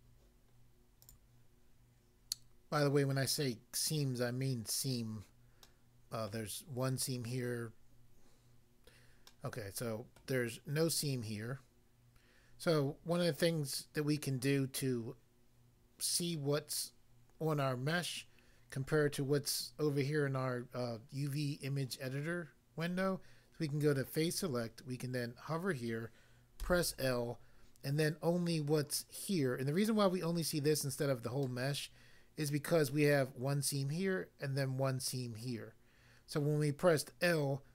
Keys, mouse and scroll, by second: 1.1 click, 1.5 click, 5.6 middle click, 6.3 middle click, 9.3 middle click, 10.1 middle click, 24.2 click, 26.7 l, 31.4 middle click, 32.5 middle click.